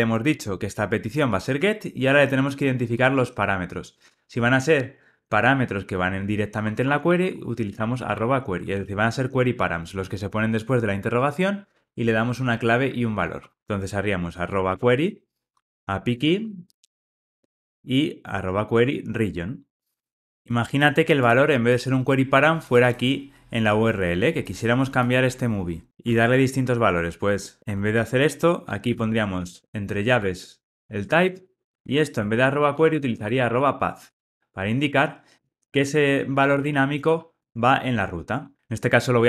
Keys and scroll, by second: 14.7 Return, 16.0 Tab, 35.4 Return, 37.3 Return, 37.6 Tab.